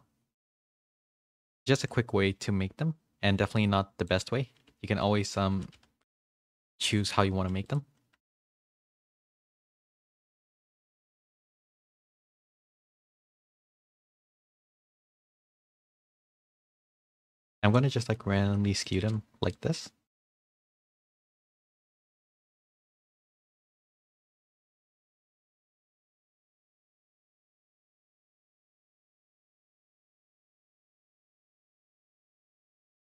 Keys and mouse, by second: 1.6 alt+click, 2.5-4.7 drag, 4.7 w, 5.5 g, 7.0 shift+middle click, 7.3 2, 7.6 alt+click, 8.2 alt+click, 9.2 w, 11.2 click, 12.4 2, 13.3 alt+click, 14.4 click, 16.5 alt+click, 17.3 click, 18.9 alt+click, 19.5-23.1 drag, 23.5 g, 25.9 middle click, 27.1 alt+click, 29.9 click, 31.2 2, 31.8 alt+click, 32.3-33.1 drag.